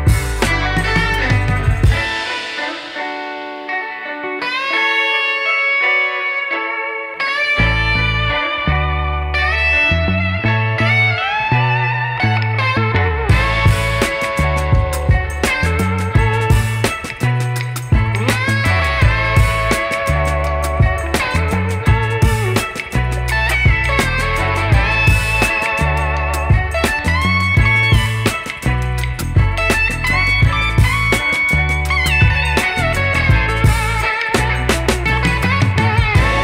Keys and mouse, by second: 6.8 click, 16.0 click, 20.5 shift+b, 21.6-22.2 typing, 22.4 click, 24.1 ], 24.5 click, 25.7 [, 26.1 click, 28.9-35.3 typing, 29.1 click, 29.9 click, 31.5 click, 32.5 click, 34.7 click.